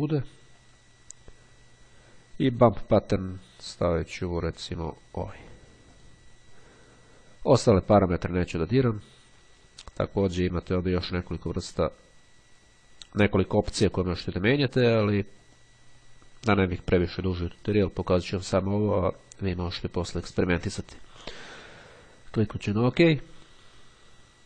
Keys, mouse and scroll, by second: 0.7 click, 2.6 click, 3.8-4.4 scroll up 1, 5.4 click, 6.2 click, 10.5 click, 15.6 click, 22.8 click.